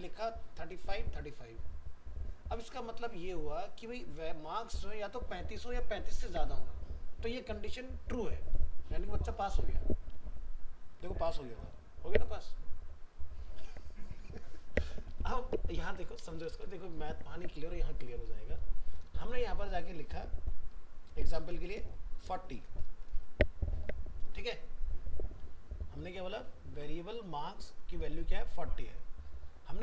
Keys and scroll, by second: 9.3 ctrl+s, 15.1 alt+Tab.